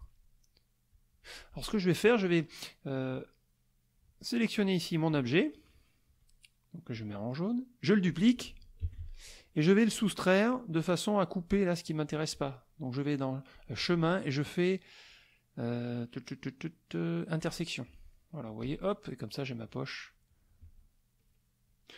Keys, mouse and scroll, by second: 0.9 click, 1.7 middle click, 3.1-4.2 drag, 4.6 click, 6.2 click, 6.9 click, 7.5 middle click, 8.8 ctrl+d, 9.8 shift+click, 13.5 click, 17.4 click, 18.1 middle click, 20.6 shift+click, 21.7 shift+click.